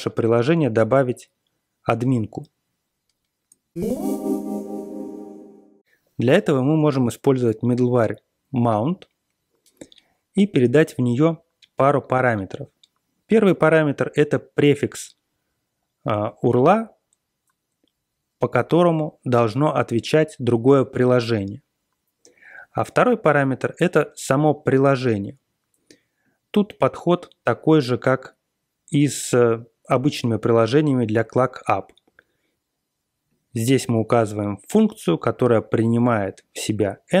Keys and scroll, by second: 3.7 ctrl+x, 7.2 BackSpace, 7.6 BackSpace, 8.1 BackSpace.